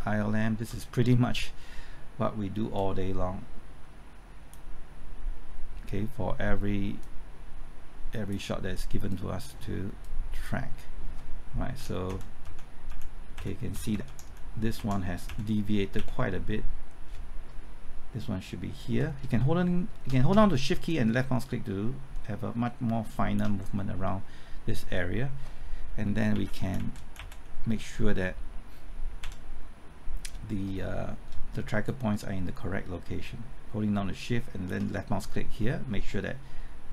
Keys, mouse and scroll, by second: 2.7-8.5 drag, 11.7 Left, 12.0-13.7 typing, 14.8 Right, 19.0-20.3 typing, 20.9-23.4 shift+drag, 26.0 Left, 26.3-27.2 typing, 29.2 Right, 31.9-34.7 shift+drag.